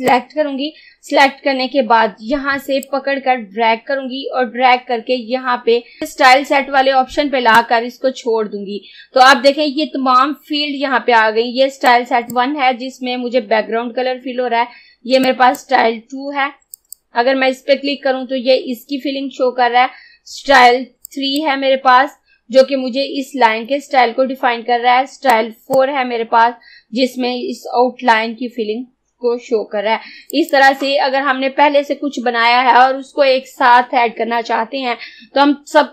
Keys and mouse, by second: 2.9-7.5 drag, 11.9-14.9 drag, 15.3-16.8 drag, 21.1 click, 25.4-28.4 drag, 30.4 click.